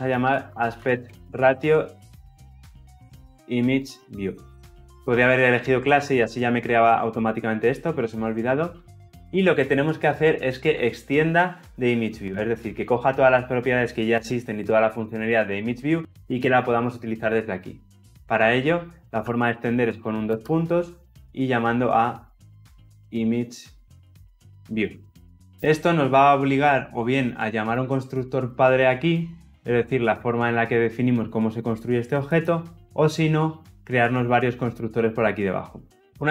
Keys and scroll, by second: 6.8 Return, 24.5 Return, 25.4 ctrl+alt+o.